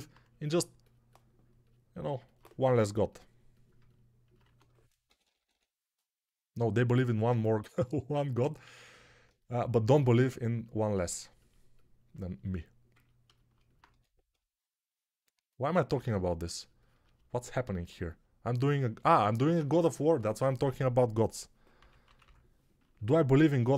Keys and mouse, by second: 2.5 g, 4.3-5.4 typing, 13.8 1, 21.7 p, 21.9 ], 22.1 ].